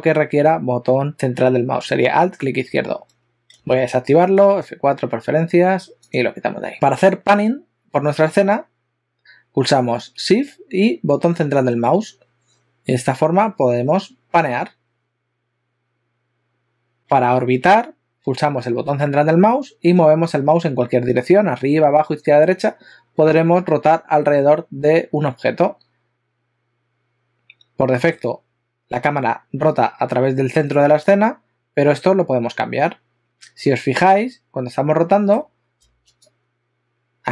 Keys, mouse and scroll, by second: 3.6 F4, 11.9 shift+middle click, 17.0 middle click, 19.4 middle click, 34.0 middle click.